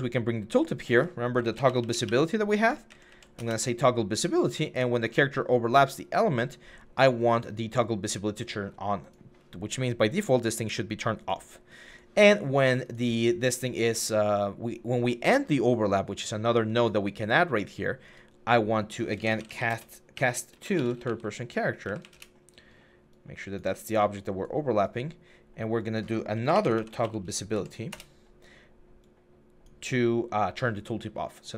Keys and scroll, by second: 1.2-2.7 typing, 3.2 Return, 18.9-20.9 typing, 21.7 Up, 21.8 Up, 21.9 Return, 23.9 typing, 25.9-27.3 typing, 27.7 Return.